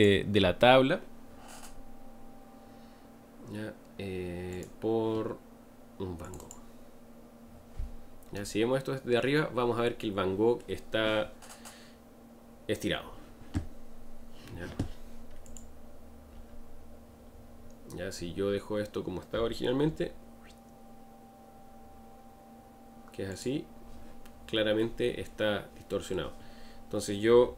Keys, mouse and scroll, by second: 4.8-6.5 drag, 7.9-8.2 scroll down 3, 8.3-27.3 middle drag, 27.3 s.